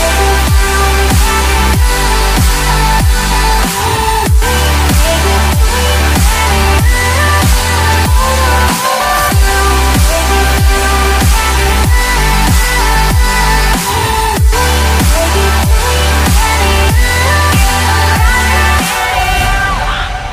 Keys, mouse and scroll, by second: 5.4 Escape, 13.5 ctrl+shift+click, 16.8 3, 17.0 Tab, 17.2 3, 17.3 Tab, 19.2 ctrl+click.